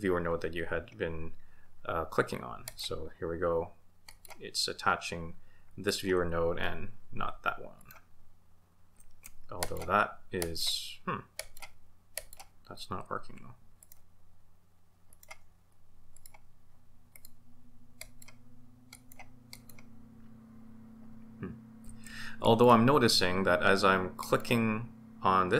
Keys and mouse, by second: 2.6 ctrl+shift+click, 4.1 ctrl+shift+click, 7.8 ctrl+shift+click, 9.6 ctrl+shift+click, 10.4 ctrl+shift+click, 11.3 ctrl+shift+click, 12.1 ctrl+shift+click, 13.8 ctrl+shift+click, 15.1 ctrl+shift+click, 16.1 ctrl+shift+click, 17.1 ctrl+shift+click, 18.0 ctrl+shift+click, 18.9 ctrl+shift+click, 19.6 ctrl+shift+click, 22.4 ctrl+shift+click, 24.2 ctrl+shift+click.